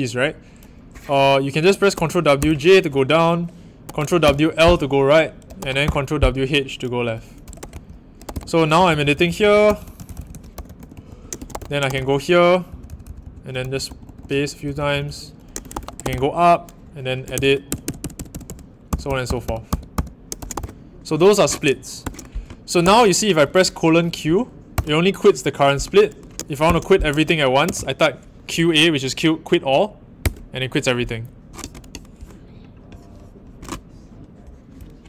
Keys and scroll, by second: 1.9 ctrl+w, 3.8 ctrl+w, 5.5 ctrl+w, 7.6 ctrl+w, 8.2 ctrl+w, 8.2-22.8 typing, 8.3 ctrl+l, 24.7 Return, 26.4-27.6 typing, 30.2 Return.